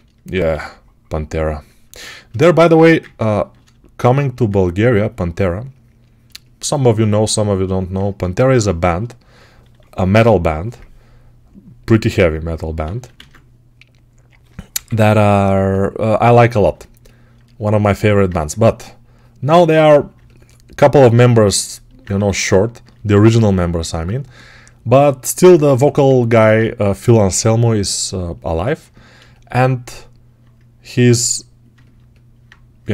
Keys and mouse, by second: 0.4 2, 2.6 1, 4.4-11.8 alt+shift+right drag, 11.8 x, 12.7 ctrl+z, 13.0 ctrl+z, 14.6 p, 17.1-32.9 right drag, 18.2 2, 22.0 1, 26.9 g.